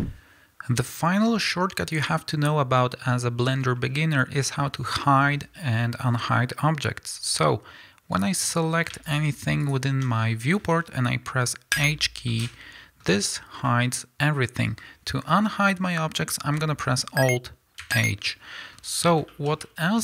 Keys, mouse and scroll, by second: 0.0 click, 2.3-2.8 scroll down 1, 2.8-3.3 scroll up 1, 3.3-3.7 scroll down 1, 3.8-5.3 scroll up 1, 5.3-7.1 scroll down 1, 7.1 scroll up 1, 8.2 click, 9.2 shift+click, 10.2 scroll down 1, 11.0-11.7 scroll up 1, 11.7 h, 12.3-14.7 middle drag, 17.8 alt+h, 18.3 middle click, 19.0 scroll up 1, 19.3 shift+middle click, 19.6 middle click.